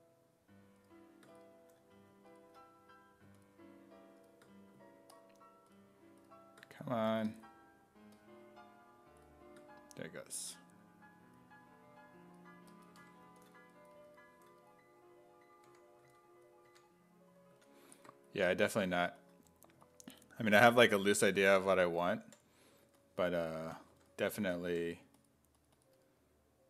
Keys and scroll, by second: 13.0 1, 15.7 1, 16.1 s, 16.7 1, 17.6 s, 21.4-25.2 typing.